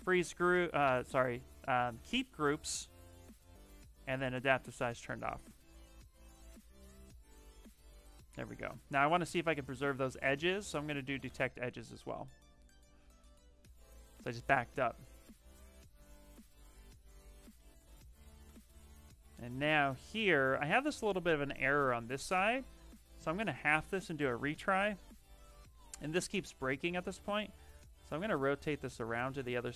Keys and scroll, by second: 9.8 ctrl+z, 26.3 ctrl+z, 26.9 w.